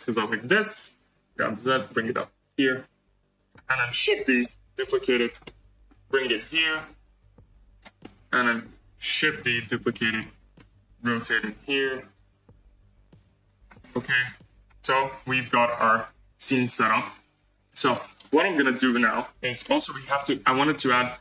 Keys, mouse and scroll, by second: 0.1-0.5 scroll, 1.1 g, 2.7 g, 4.3 shift+d, 5.4-6.5 middle drag, 6.5 r, 7.9-9.2 middle drag, 9.2 shift+d, 10.1-11.2 middle drag, 11.2 r, 14.1 g, 14.7-17.5 middle drag, 17.5 click, 17.8-18.3 middle drag, 18.3 scroll up 4, 19.2-19.5 scroll up 1, 19.5-21.2 shift+middle drag.